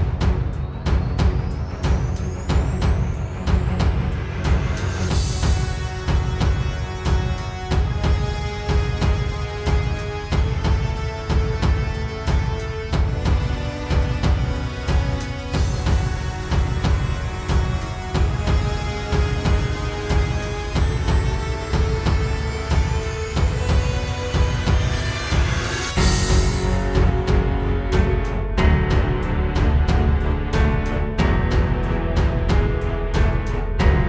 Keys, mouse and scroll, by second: 0.0 ctrl+KP_7, 0.2-1.2 middle drag, 0.4 n, 1.6 click, 2.4 click, 3.1-3.4 scroll up 1, 3.3 KP_3, 3.4 middle click, 3.6 n, 3.9 right click, 4.1 middle click, 4.3 shift+s, 4.8 right click, 5.1 shift+s, 5.7-6.4 right drag, 5.9-6.3 middle drag, 6.4-6.8 middle drag, 6.6-7.4 right drag, 7.4 ctrl+p, 7.9 middle click, 8.1 right click, 8.4 n, 8.5-8.8 middle drag, 8.8 alt+a.